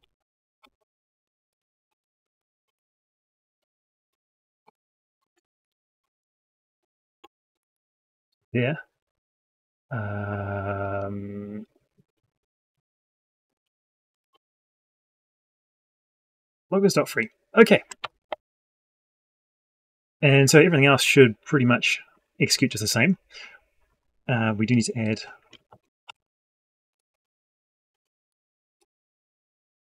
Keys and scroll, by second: 6.6 ctrl+shift+c, 17.8 ctrl+shift+Up, 25.5 ctrl+shift+Down.